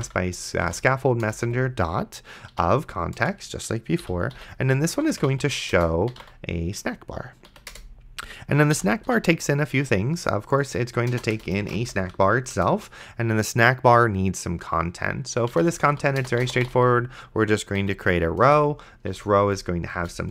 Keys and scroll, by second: 0.0-1.5 typing, 1.3 Return, 2.5 o, 3.2 Return, 4.0 End, 4.4-6.7 typing, 7.5 Down, 7.7 Return, 8.8 End, 9.1 ;, 11.1-12.5 typing, 11.4 Return, 12.6 Return, 15.5-16.9 typing, 17.8 Down, 18.4 Return, 19.4 c, 20.0 Return.